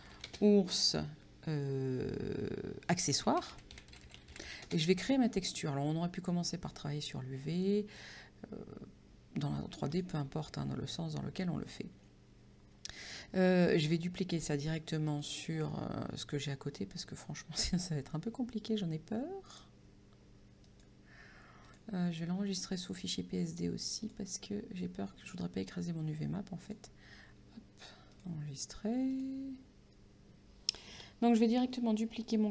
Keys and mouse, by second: 0.0-0.7 typing, 3.0-5.0 typing, 5.1 Return, 6.7 click, 9.9 click, 15.1 click, 20.7 click, 24.1 click, 26.7 click, 28.2 click, 32.3 right click.